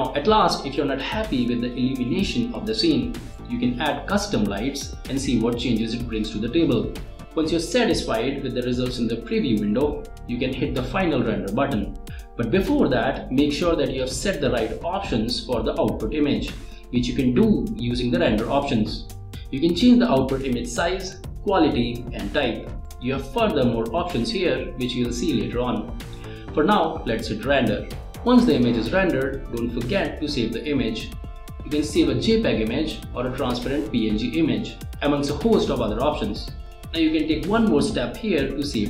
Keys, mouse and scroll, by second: 3.9 click, 14.2 click, 19.7 click, 28.4 click, 28.8 click, 29.2 click, 37.3 click, 38.7 click.